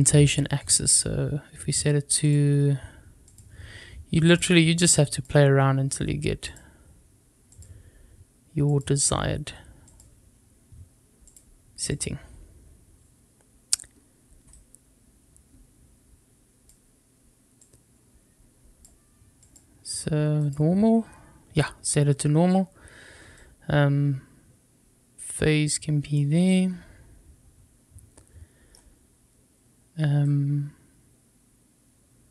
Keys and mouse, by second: 2.2-3.3 drag, 4.2-5.2 drag, 6.5-7.6 drag, 8.6-9.9 drag, 11.3-12.0 drag, 14.6-16.7 drag, 17.5-18.8 drag, 19.4-20.5 drag, 23.4-26.2 drag, 26.4-28.6 middle drag, 30.3-32.3 drag.